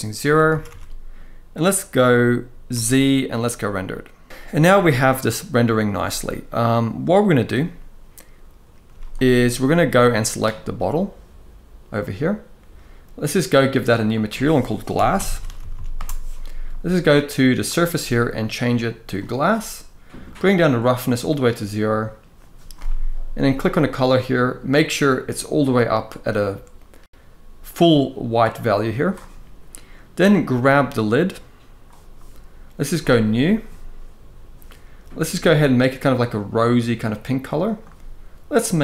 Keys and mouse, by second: 0.3 ctrl+s, 0.4 ctrl+s, 2.4 z, 8.6 z, 9.8 click, 13.3 click, 13.9-15.7 drag, 15.5 s, 17.4-19.0 drag, 20.0 click, 23.3 click, 30.1 click, 38.3 click.